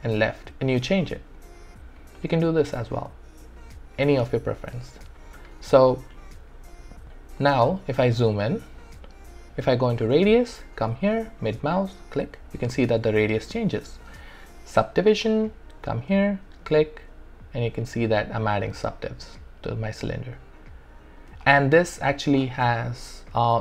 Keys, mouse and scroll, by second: 6.7 alt+click, 7.6 alt+right click, 8.5 alt+middle click, 10.0 click, 11.8-13.6 middle drag, 15.1 click, 16.5-21.3 middle drag, 21.5 alt+right click, 21.8-23.6 alt+drag.